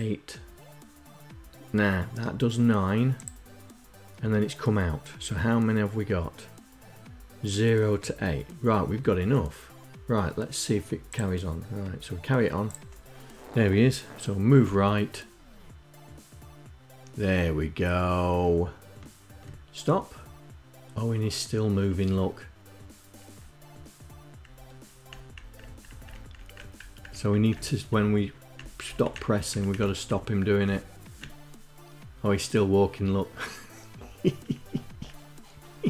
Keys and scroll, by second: 12.5 Right, 27.9 Left.